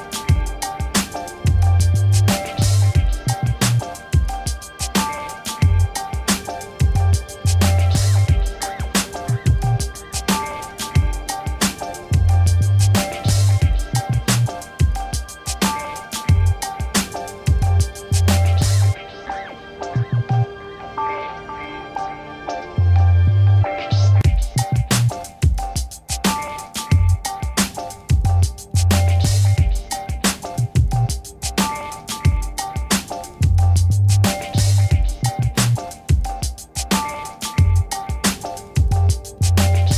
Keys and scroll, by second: 18.9 Right, 19.7 ctrl+shift+Left, 20.5-21.4 typing, 22.0 Return, 26.5 ctrl+-, 27.3 v, 39.0 ctrl+t.